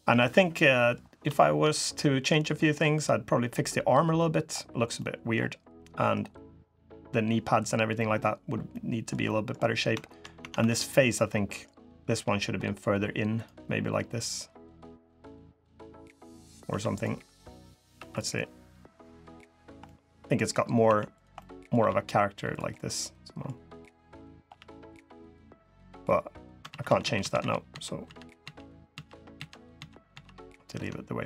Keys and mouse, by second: 0.4 drag, 1.1 shift+drag, 1.5-2.2 middle drag, 2.7 click, 3.4-4.2 middle drag, 4.7-5.1 middle drag, 5.5 middle drag, 5.6 click, 6.4 click, 7.7 drag, 8.5-8.9 drag, 9.0 drag, 9.8 shift+drag, 10.1 Tab, 10.3 3, 10.7 click, 11.8 g, 13.4 click, 14.5 g, 16.4 1, 16.9 g, 17.7 3, 18.1-18.6 middle drag, 18.8 g, 19.6-20.3 drag, 20.6 1, 21.1 click, 21.5 g, 22.5-23.2 drag, 23.8-24.2 drag, 24.2 g, 24.9-25.4 drag, 26.4-26.8 ctrl+z, 26.9 ctrl+z, 27.1 ctrl+z, 27.5 ctrl+z, 27.8 ctrl+z, 28.2 ctrl+z, 28.7 ctrl+z, 29.1 ctrl+z, 29.5 ctrl+z, 29.9 ctrl+z.